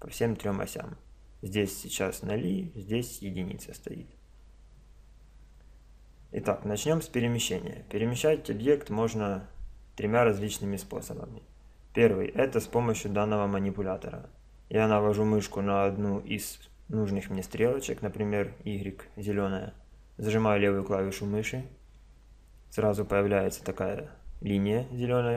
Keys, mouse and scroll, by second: 6.6-8.5 middle drag, 20.8 click, 22.3 middle click, 22.4 click, 22.5 middle click, 22.6 click.